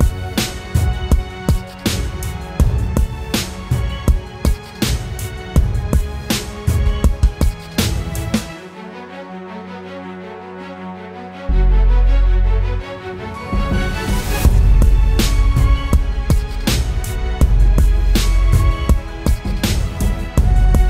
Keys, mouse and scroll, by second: 2.0 alt+click, 5.9-7.5 typing, 10.0 double click, 17.5-18.1 typing, 18.7 double click.